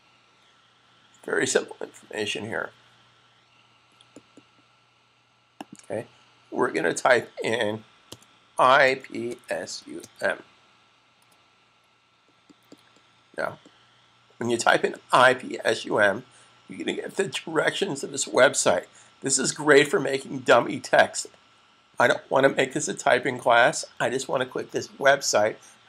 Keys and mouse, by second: 5.7 click, 7.9-9.8 typing.